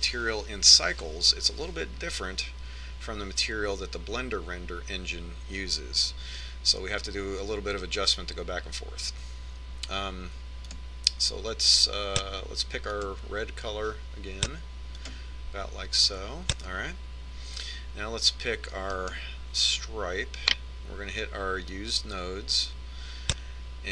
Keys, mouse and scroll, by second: 12.1-13.9 drag, 20.4 right click, 23.3-23.9 drag.